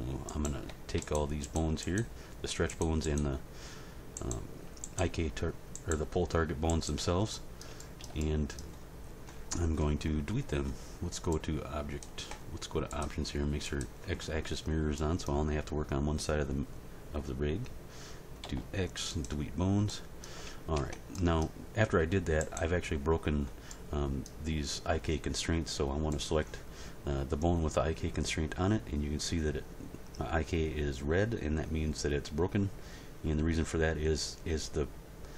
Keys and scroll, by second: 18.4 x, 20.7 Tab.